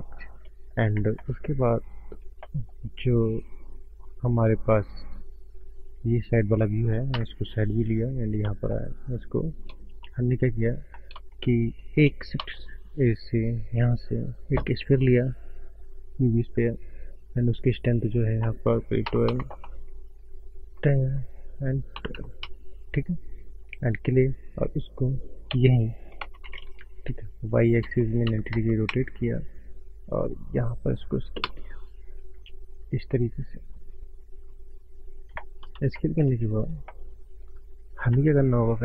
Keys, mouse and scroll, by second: 0.2 click, 0.5 middle click, 0.6 middle click, 0.6 middle click, 1.2 middle click, 1.2 scroll up 1, 1.4 middle click, 1.5 middle click, 2.4 middle click, 2.8 scroll down 4, 3.2 click, 4.4 click, 4.8 click, 7.2 KP_3, 8.2 scroll down 4, 8.5 middle click, 9.0-9.9 scroll down 7, 10.1 shift+middle click, 10.3 middle click, 10.5 click, 11.1 scroll up 2, 11.4 shift+middle click, 12.6 shift+a, 18.2 click, 23.3 scroll down 5, 23.9 scroll down 1, 23.9-26.3 drag, 30.2 click, 31.4 click, 32.7 s, 33.4-34.0 scroll up 3, 33.4 s, 34.3 scroll up 1, 35.0 click, 35.5-35.8 scroll up 2, 36.0 shift+middle click, 36.5 click, 36.8 shift+scroll up 1, 37.2 shift+middle click.